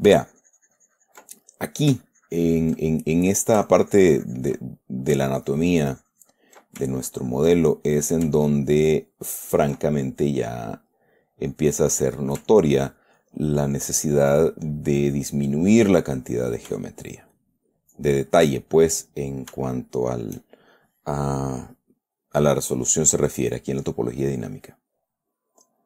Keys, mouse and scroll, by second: 1.7 ctrl+click, 2.4-3.8 ctrl+drag, 4.1-5.5 ctrl+drag, 5.6-7.1 ctrl+drag, 7.3 ctrl+click, 7.9 ctrl+middle click, 8.7-10.1 ctrl+drag, 10.2 ctrl+middle click, 10.8 ctrl+middle click, 11.5 middle click, 12.3 middle click, 12.9-15.6 ctrl+drag, 15.9 click, 17.7 shift+click, 19.0 shift+click, 20.1 shift+click, 24.5 click, 25.3-25.8 drag.